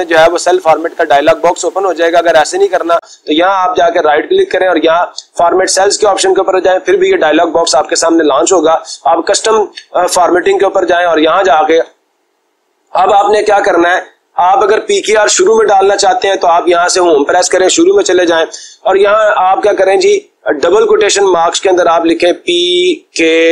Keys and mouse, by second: 0.8 click, 1.8 click, 3.1 right click, 5.0 click, 9.0-10.0 drag, 11.2-12.3 drag, 16.9 Home, 20.6 ', 22.2 p, 23.1 k.